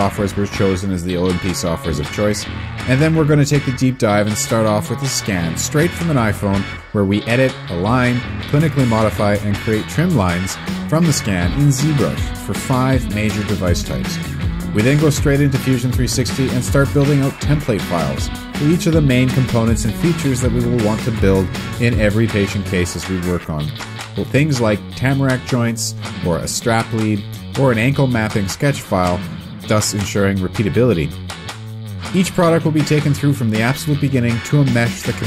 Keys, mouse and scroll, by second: 2.7 shift+click, 8.9 alt+w, 12.9 ctrl+space, 14.6 8, 18.8 s, 23.8 l, 23.8 Return, 25.9 h, 28.0 Return, 28.2 Escape, 28.2 middle click, 28.3 l, 28.4 click, 28.5 Escape, 30.4 right click, 30.5 click, 30.8 right click, 30.9 click, 31.7 ctrl+l, 33.5 scroll down 1, 33.6 click, 33.7 right click, 34.2 click, 34.4 middle click.